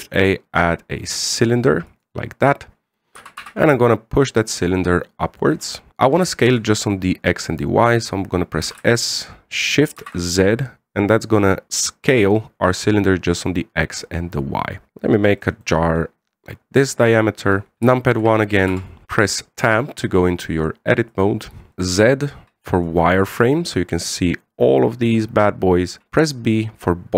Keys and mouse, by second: 0.3 shift+a, 3.9 g, 5.9 middle click, 7.2 shift+middle click, 9.4 s, 16.4-17.7 middle drag, 17.7 KP_1, 18.7 shift+middle drag, 19.2 Tab, 22.2 z, 23.1 z, 23.6 right click, 26.6 b.